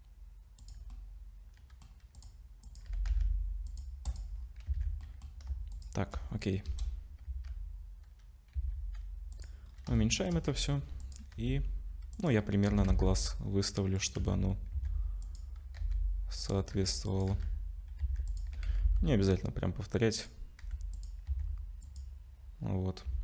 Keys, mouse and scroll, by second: 0.6 click, 0.9 middle click, 2.2 click, 2.7 click, 2.9 g, 4.1 click, 4.4-4.7 scroll down 3, 4.7 ctrl+s, 5.0 middle click, 6.7 KP_0, 7.3 z, 8.6 s, 9.7-10.0 scroll up 3, 10.0 shift+middle click, 10.5 g, 11.3 r, 12.7 r, 14.2 z, 14.7 s, 15.8-18.5 typing, 20.6 g, 21.3 s, 22.6-23.2 scroll down 3.